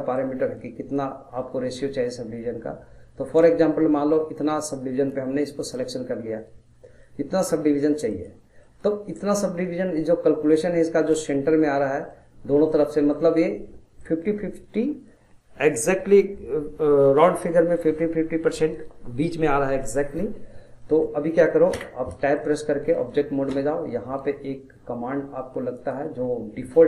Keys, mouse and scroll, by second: 7.0-8.1 middle drag, 8.1 click, 8.6-17.1 middle drag, 20.8 middle click, 21.7 Tab, 22.2-25.7 middle drag, 25.7-26.8 drag.